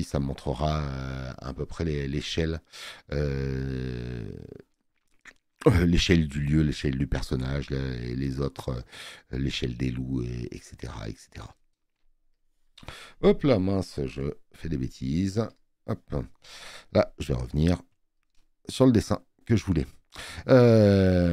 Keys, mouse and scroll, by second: 15.6 click.